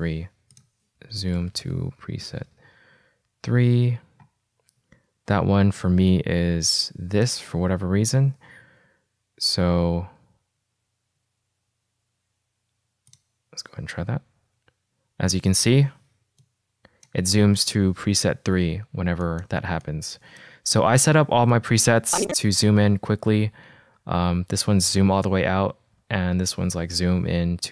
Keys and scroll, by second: 1.3-3.3 typing, 14.6 ctrl+f, 18.0 ctrl+f, 23.3 -, 24.2 -, 26.9 =.